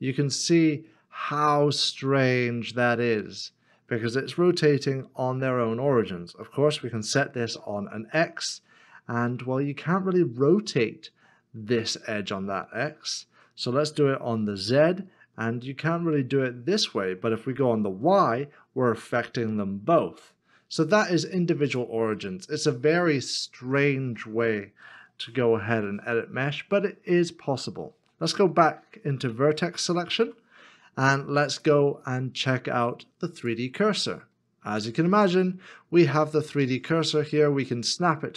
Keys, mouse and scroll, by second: 7.4 r, 14.4 z, 17.9 z, 22.2 middle click, 25.9 ctrl+z, 26.1 middle click, 30.2 1, 34.1 scroll down 1, 35.5 shift+right click.